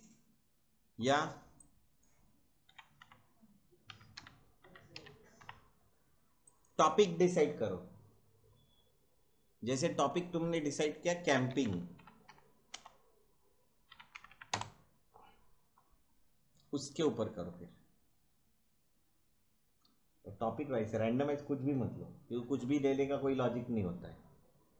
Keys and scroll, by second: 2.7-5.8 typing, 11.0-14.8 typing.